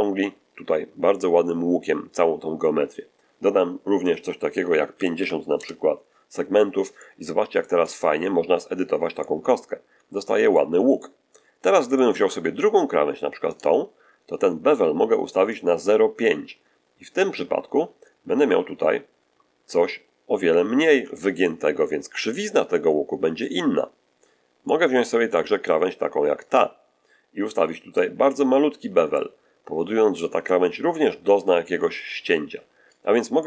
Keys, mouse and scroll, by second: 4.0 click, 4.9 5, 5.1 0, 5.5 Return, 6.9-8.7 middle drag, 9.1-10.7 middle drag, 10.9 middle click, 11.9 middle click, 13.4 right click, 15.5-20.9 drag, 21.3-22.5 ctrl+shift+middle drag, 24.5 middle click, 26.3 right click, 27.9-33.0 drag, 33.3-33.4 middle drag.